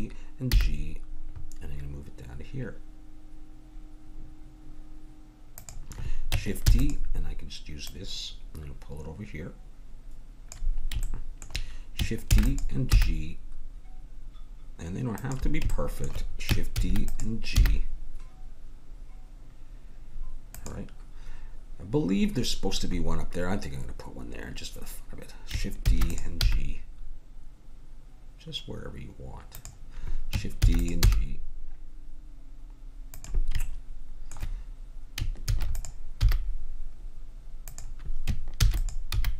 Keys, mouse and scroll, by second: 0.5 g, 6.6 shift+d, 7.8-9.8 drag, 12.4 shift+d, 12.9 g, 16.7 shift+d, 17.6 g, 25.8 shift+d, 26.4 g, 30.6 shift+d, 31.0 g, 33.6-35.5 drag, 35.5 shift+d, 36.2 g, 38.5 shift+d, 39.1 g.